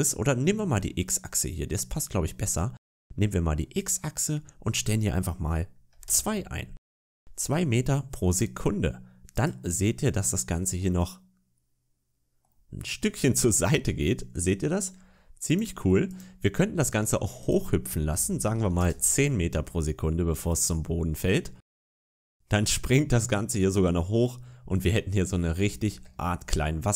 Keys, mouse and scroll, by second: 0.5 middle click, 3.6 click, 8.1 click, 9.2 click, 10.7 middle click, 15.3 click, 15.9 click, 17.3 click, 20.3 click, 20.7-21.9 scroll down 2, 21.9 click, 24.2 middle click, 25.5 shift+middle click, 26.0 scroll up 2, 26.4 middle click.